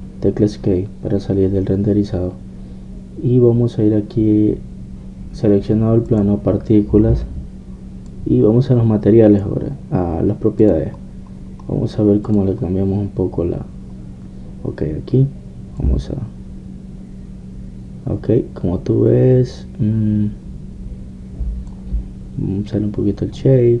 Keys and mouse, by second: 0.0 Escape, 7.1-8.9 drag, 11.0 middle click, 11.6-15.1 drag, 15.1-16.7 middle drag, 16.8-18.5 drag, 18.8-23.8 middle drag.